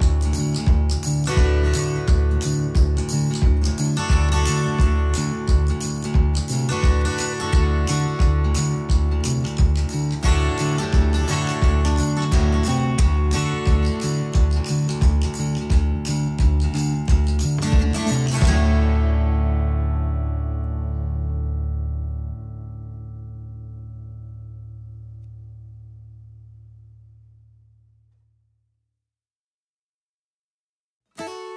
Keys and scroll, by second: 10.1 shift+space, 11.3-12.2 typing, 14.4 t, 16.7 Caps_Lock, 17.8 shift+Caps_Lock, 17.9-19.3 typing, 22.6-28.2 typing.